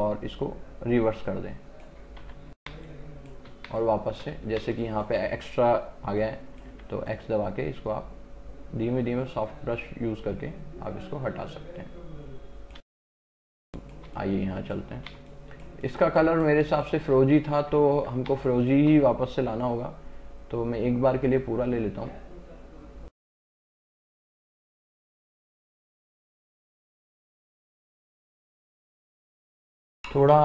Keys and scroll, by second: 2.3 x, 2.8 space, 6.8 x, 12.9 space, 18.0 x, 18.4 space, 29.2 space.